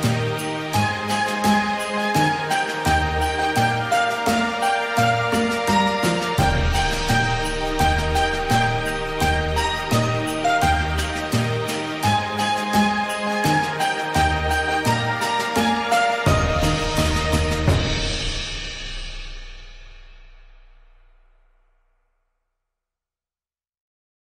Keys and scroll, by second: 15.7 ctrl+0, 22.5 ctrl+End.